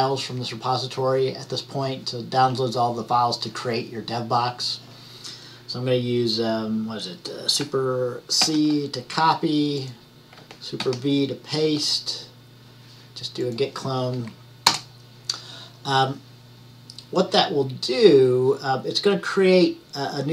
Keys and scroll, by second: 8.5 super+c.